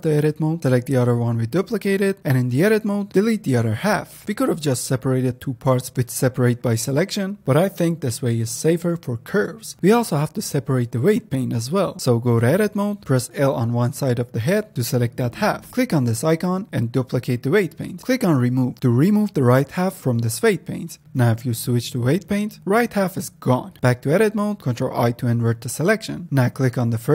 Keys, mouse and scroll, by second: 0.4 click, 0.5 click, 1.0 Tab, 1.3 click, 2.7 ctrl+click, 3.8 x, 3.9 click, 4.1 z, 4.9-5.6 middle drag, 5.6 scroll up 2, 5.8-6.4 middle drag, 6.4 scroll up 1, 6.7 middle click, 7.5 click, 8.0 click, 8.5 click, 9.3 click, 9.5 click, 12.0 ctrl+Tab, 13.3 click, 14.1 l, 14.8-15.9 middle drag, 15.9-18.4 drag, 19.2-21.4 drag, 21.4 ctrl+Tab, 23.8 Tab, 25.5 ctrl+i.